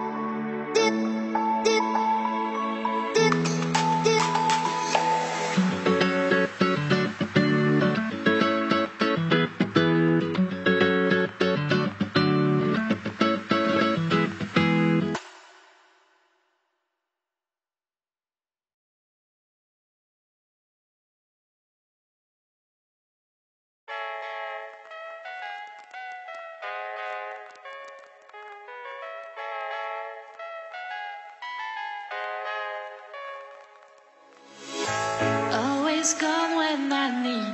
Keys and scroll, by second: 15.8 ctrl+0, 23.5 ctrl+c, 23.8 ctrl+v, 25.3 ctrl+=, 30.5 Down, 37.1 Down.